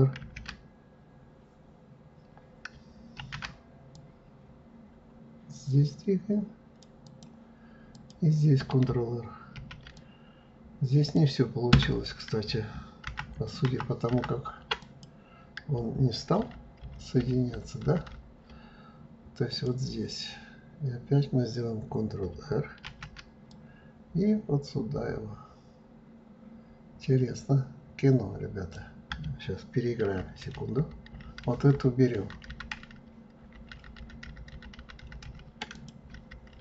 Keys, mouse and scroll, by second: 1.5 ctrl+f, 3.2 ctrl+r, 7.9 click, 9.6 ctrl+r, 13.0 ctrl+t, 13.7 ctrl+t, 14.8 click, 16.4 ctrl+z, 16.8 ctrl+z, 19.5 click, 22.9 ctrl+r, 36.1 ctrl+z, 36.5 ctrl+z.